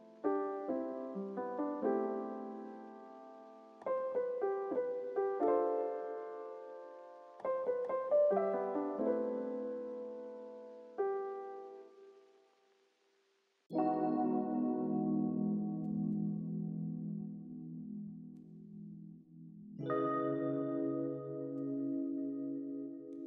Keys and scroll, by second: 0.0-0.4 typing, 4.3 v, 11.0 z, 20.7 z.